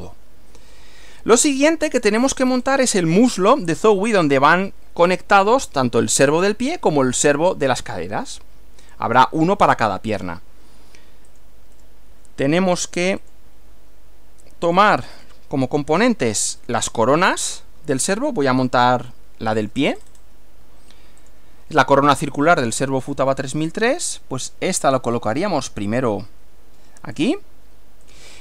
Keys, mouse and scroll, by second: 1.2-2.2 shift+middle drag, 2.4-2.8 shift+scroll up 1, 11.3 click, 11.9 right click, 13.2 click, 14.7 click, 15.1 scroll down 1, 18.0 scroll up 1, 19.2-20.0 shift+middle drag, 20.0-20.4 shift+scroll up 1, 21.3 click, 23.2 click, 25.5 click, 27.2 click, 27.4-28.1 scroll up 2, 28.1 click.